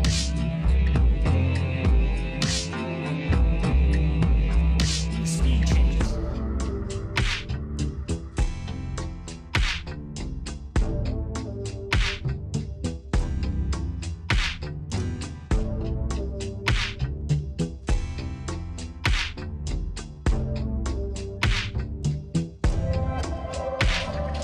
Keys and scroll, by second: 3.7 v, 21.0 8.